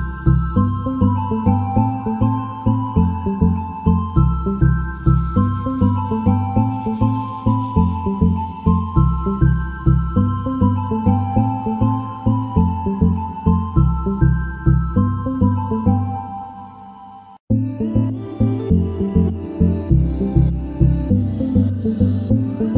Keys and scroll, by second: 0.0-13.9 typing, 16.8-20.7 typing, 22.1-22.7 typing.